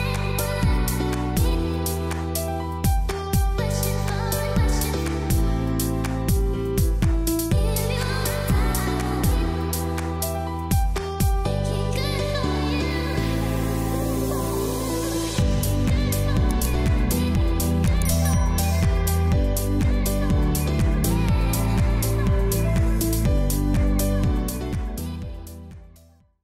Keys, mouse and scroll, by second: 0.5 click, 0.6 click, 2.1 scroll up 1, 3.2-3.7 scroll down 1, 4.5-4.8 scroll up 1, 6.3 click, 7.2 scroll up 1, 8.5 click, 9.2 scroll down 1, 10.1 scroll up 1, 10.9-11.9 scroll down 1, 11.9 scroll up 1, 12.3-12.9 scroll down 1, 12.9-13.9 scroll up 1, 14.4-16.0 scroll down 1, 16.0 scroll up 1, 16.2 space, 16.4 click, 16.7 space, 17.1 click, 17.3 space, 18.5 click, 20.2-20.7 scroll up 1, 20.7-21.0 scroll down 1, 21.0-22.2 scroll up 1.